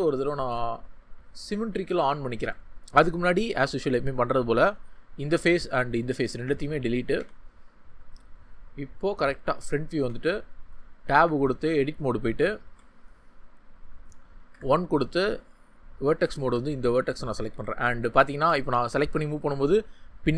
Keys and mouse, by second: 2.4 Tab, 3.4 3, 6.1 x, 7.1 Tab, 8.3-9.7 drag, 11.1 1, 12.6 Tab, 14.5 1, 16.3 g, 17.3 click, 17.5 ctrl+z, 18.2 g, 19.0-20.3 drag.